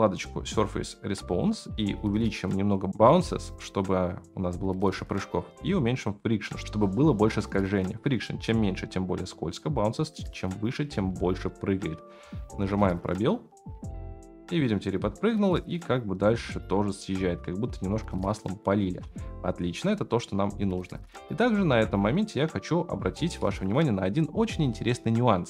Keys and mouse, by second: 3.0-4.7 drag, 6.0 click, 11.5-12.3 middle drag, 12.6 space, 18.8 space, 21.4 ctrl+s, 23.0-23.4 shift+middle drag.